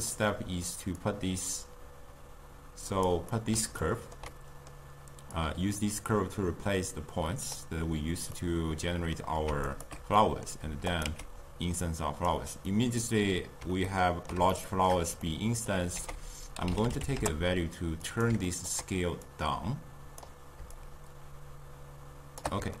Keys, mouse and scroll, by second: 1.0-3.4 drag, 3.4-5.4 middle drag, 5.4 drag, 8.4-9.7 middle drag, 9.7 alt+shift+click, 10.2-11.0 middle drag, 11.0 click, 11.1 x, 11.9 click, 12.7-15.3 middle drag, 15.3-15.7 scroll up 2, 15.7 middle click, 16.0 ctrl+a, 18.5 ctrl+middle click, 19.3-22.8 drag.